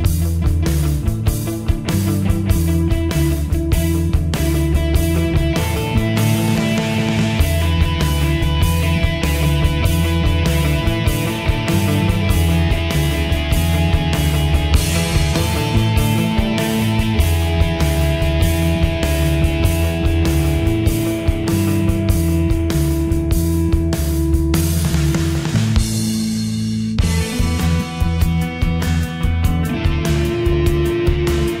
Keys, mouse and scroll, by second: 10.0-10.7 typing, 12.4 shift+Page_Up, 13.5-18.6 drag, 18.6 right click, 19.7-24.7 drag, 24.7 shift+Page_Up, 28.5-31.6 drag, 30.3 typing.